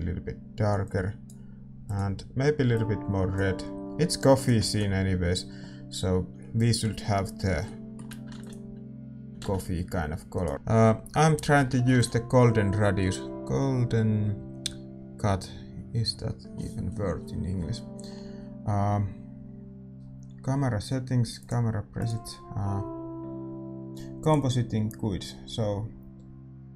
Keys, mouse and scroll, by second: 6.4 ctrl+s, 7.1-10.3 middle drag, 10.3 right click, 10.3 shift+z, 10.5 ctrl+s, 10.5-26.7 middle drag.